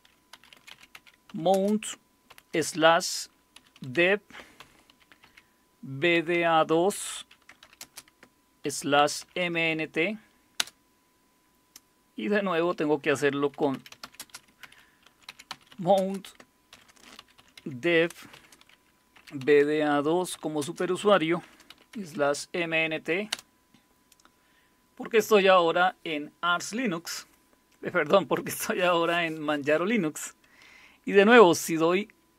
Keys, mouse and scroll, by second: 0.3-2.3 typing, 3.6-11.1 typing, 13.6-23.8 typing, 32.2-32.3 typing.